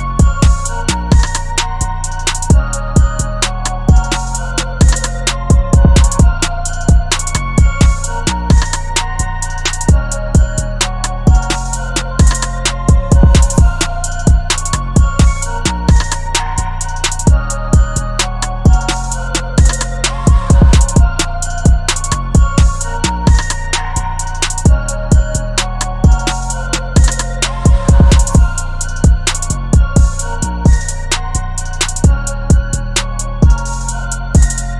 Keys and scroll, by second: 1.2 ], 1.3 ], 1.9 super+t, 4.8 super+t, 7.6 v, 22.8 Page_Down, 22.9 Page_Down, 23.2 End, 30.3 super+z, 32.3 super+g.